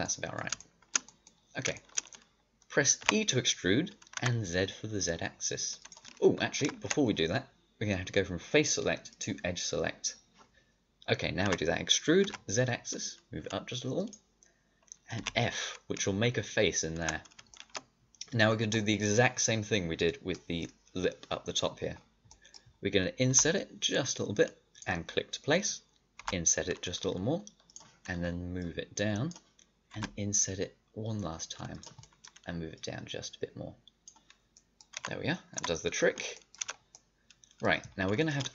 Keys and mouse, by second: 3.0 e, 6.5 ctrl+z, 9.1-11.4 drag, 11.4 e, 15.1 f, 17.0 middle click, 17.4 click, 18.4 click, 20.2-22.2 middle drag, 23.2 i, 26.1 i, 29.8 i, 32.7-34.0 drag, 34.9 a, 35.5 Tab, 36.6 a.